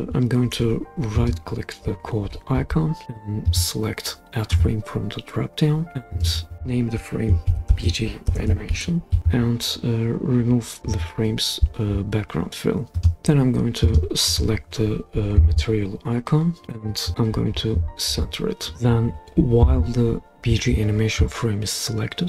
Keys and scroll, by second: 7.2-9.2 typing.